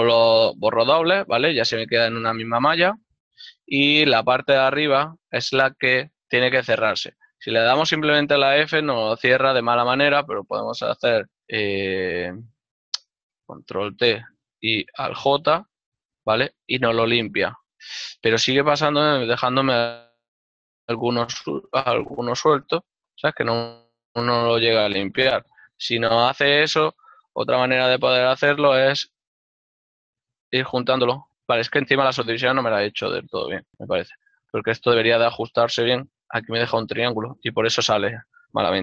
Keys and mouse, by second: 1.9 click, 4.3 click, 6.0 alt+right click, 8.3 f, 13.5 ctrl+t, 15.6 alt+j, 17.5 middle click, 35.7 ctrl+z, 35.7 f, 37.7 right click, 38.0 f.